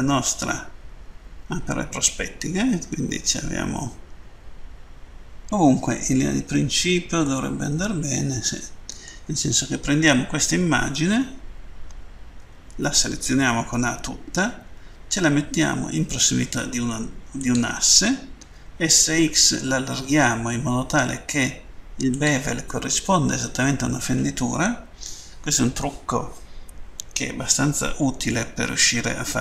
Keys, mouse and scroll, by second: 7.3 middle click, 17.2 click, 18.4-19.0 typing, 22.0 click.